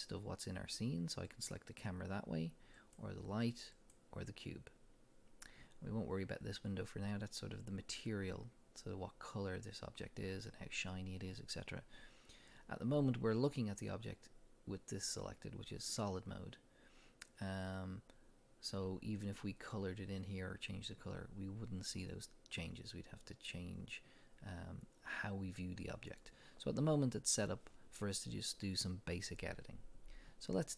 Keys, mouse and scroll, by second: 1.3 click, 2.8 click, 3.8 click.